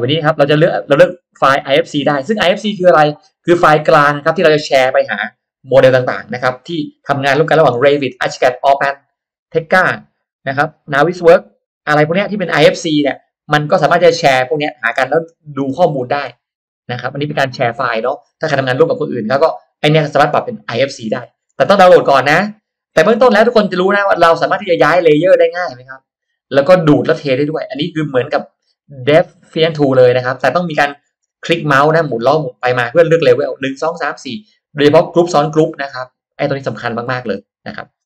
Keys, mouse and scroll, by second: 0.1-0.4 scroll up 1, 0.2 middle click, 1.1 scroll down 1, 1.3 middle click, 14.3 scroll up 1, 15.0 middle click, 15.0 scroll up 1, 15.9 middle click, 15.9 scroll up 1, 15.9 space, 16.3-16.7 scroll down 1, 25.5-27.7 scroll up 1, 27.7 scroll down 1, 28.3 middle click, 28.5 scroll up 1.